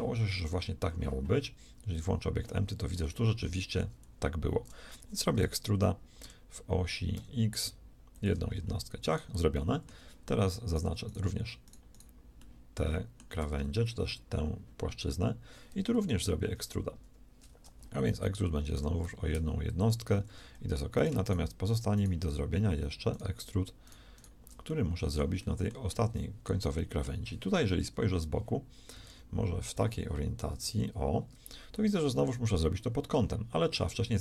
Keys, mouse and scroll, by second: 4.1 z, 6.1 e, 9.0 a, 9.9 z, 16.9 ctrl+KP_1, 18.7 e, 20.2 a, 25.5 middle click, 27.7 KP_1, 29.1 ctrl+KP_1, 30.5 KP_3.